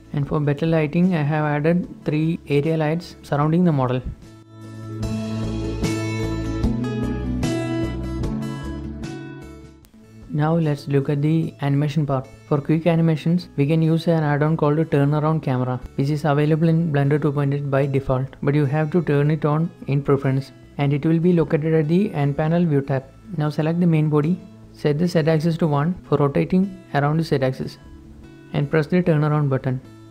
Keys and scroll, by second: 0.0-1.0 typing, 1.0 Escape, 2.2-11.4 typing, 2.3 Escape, 3.1 ctrl+z, 13.5-14.0 typing, 25.9 1, 26.1 Return, 27.4 0, 27.6 Return.